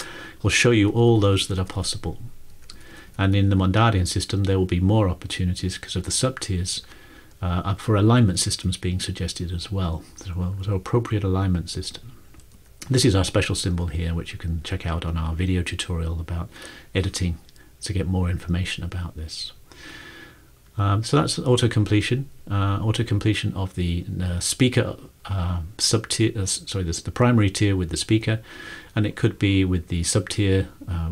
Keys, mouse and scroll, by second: 1.0 Down, 1.2-3.3 Down, 1.5 ctrl+Return, 2.6 ctrl+Return, 2.9 Up, 3.2 Up, 3.4 Up, 12.0 Down, 12.5 Up, 20.6 click.